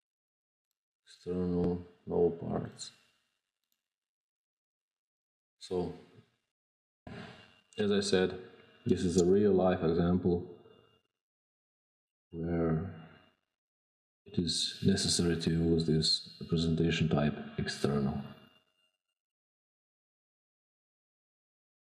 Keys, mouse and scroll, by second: 0.5 click, 2.5 click, 3.7 drag, 4.1 scroll down 2, 4.3 scroll, 4.5-4.8 scroll down 5, 5.0 scroll, 5.5 click, 19.2 click.